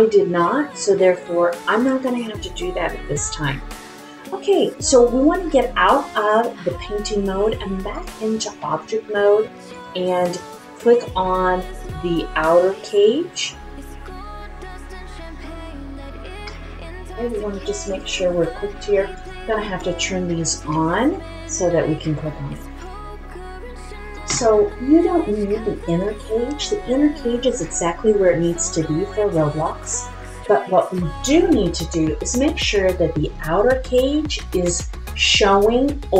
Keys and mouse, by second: 8.1-9.8 drag, 19.1 click, 19.7 click, 23.8 click, 25.8 click.